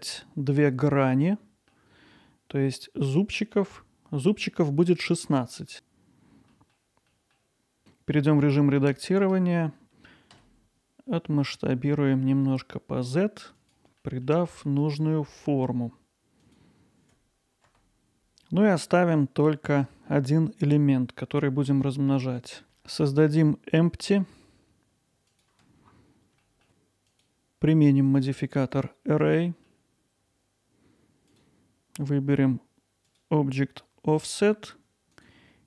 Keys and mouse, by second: 5.1 middle click, 5.5 middle click, 6.5 middle click, 7.1 middle click, 7.8 Tab, 9.3 s, 10.3 z, 13.6 click, 14.2 middle click, 15.2 ctrl+alt+middle click, 16.4 click, 16.7 i, 18.1 x, 20.4 x, 21.0 click, 21.9 ctrl+i, 22.2 x, 22.6 Tab, 22.6 shift+a, 24.4 Tab, 24.4 shift+a, 26.7 Tab, 27.1 click, 28.2-29.7 drag, 31.3-35.6 drag.